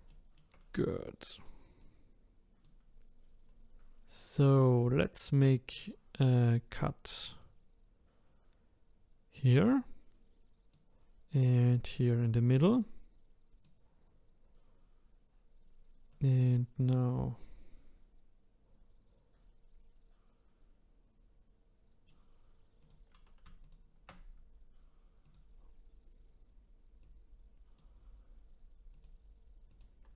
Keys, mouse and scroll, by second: 0.1 shift+middle click, 0.6-1.3 scroll up 1, 1.3 click, 1.8 click, 5.7 click, 11.7 click, 16.1 click, 16.9-19.9 middle drag, 22.8 click, 23.6 shift+click, 25.2 click, 25.9-27.0 scroll up 2, 27.0 click, 28.9 click, 29.7 click.